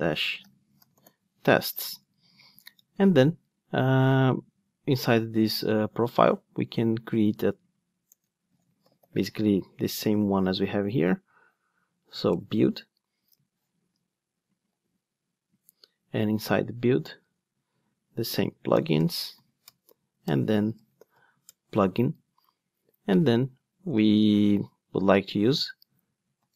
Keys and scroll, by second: 14.0 super+z, 19.7 Return.